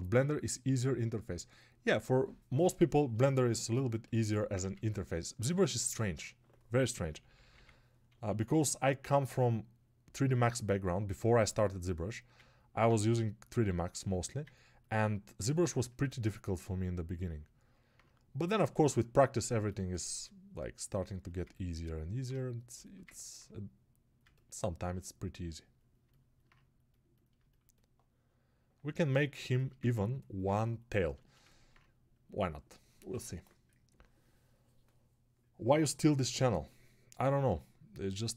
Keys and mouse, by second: 12.3-38.3 ctrl+alt+drag.